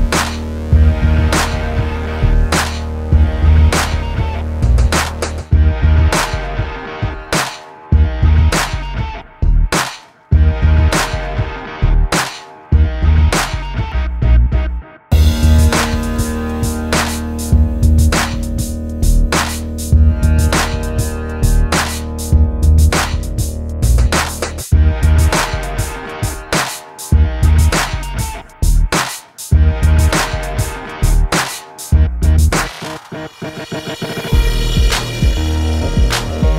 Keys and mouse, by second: 0.6 n, 1.9 middle click, 3.0 middle click, 3.6 middle click, 3.6 ctrl+Tab, 4.5 alt+m, 5.2 alt+m, 5.8 middle click, 6.5 middle click, 7.5 click, 7.8 ctrl+z, 8.3 a, 8.4 ctrl+Tab, 10.4 middle click, 11.0 ctrl+b, 12.0 ctrl+KP_Subtract, 12.2 alt+s, 12.9 ctrl+Tab, 13.7 middle click, 13.9 right click, 14.5 alt+m, 16.6 middle click, 17.5 alt+m, 18.7 ctrl+s, 19.1 middle click, 19.9 ctrl+Tab, 20.8 alt+s, 21.9 click, 22.2 click, 23.1 click, 26.0 middle click, 27.7 middle click, 30.8 ctrl+b, 31.4 ctrl+KP_Subtract, 31.5 alt+s, 32.1 click, 32.3 click, 32.7 KP_0, 35.1 Escape, 35.3 KP_0, 35.7 middle click.